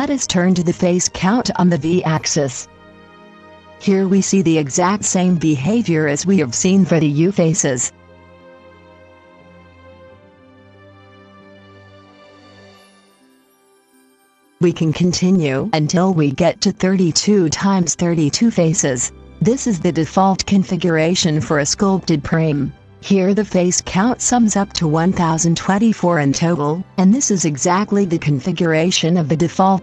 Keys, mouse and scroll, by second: 3.6-12.6 drag, 13.5-22.9 drag, 23.9-25.9 middle drag, 25.9 middle click.